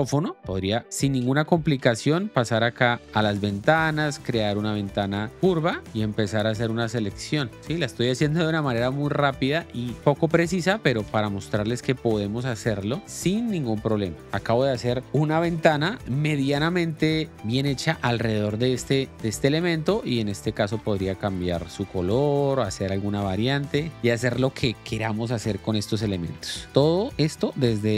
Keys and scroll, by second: 1.5 k.